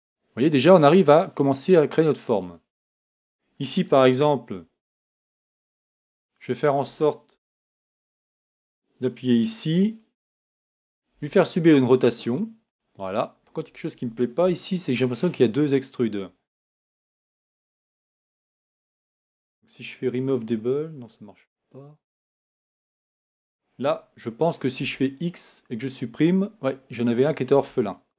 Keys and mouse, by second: 3.1-5.1 right drag, 5.1 e, 11.1 r, 13.3 click, 14.5 click, 17.3 a, 17.7 a, 23.1-24.8 right drag, 24.8 x, 27.2 right click, 27.5 x.